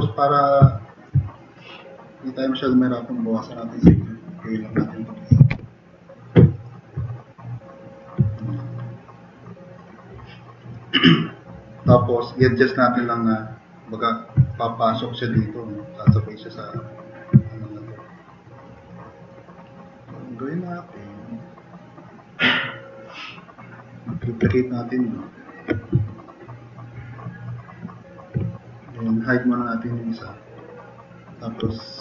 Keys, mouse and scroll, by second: 5.3 8, 5.5-8.3 Return, 6.5 drag, 8.2 click, 9.0-9.6 drag, 10.7 click, 12.0 click, 14.4-14.9 drag, 16.1-16.6 drag, 17.4 click, 17.8 click, 18.7 click, 19.1-19.5 drag, 19.6 drag, 20.0-20.3 drag, 21.1-21.6 drag, 23.1-24.0 drag, 26.0 middle drag, 27.0-28.2 drag, 31.7-32.0 drag.